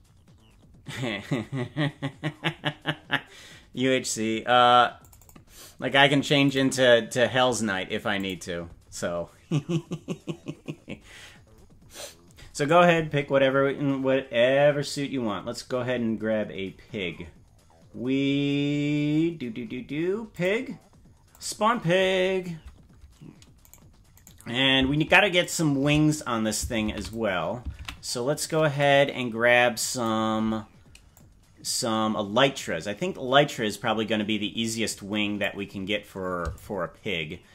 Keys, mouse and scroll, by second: 15.9-17.3 scroll down 14, 17.9-18.3 scroll down 3, 18.7-19.9 scroll down 9, 20.3 click, 21.3 click, 23.7 right click, 24.3 right click, 25.4-27.1 shift+drag, 27.9 ctrl+z, 28.8-30.0 drag, 31.1-35.4 drag, 36.6-37.5 shift+drag.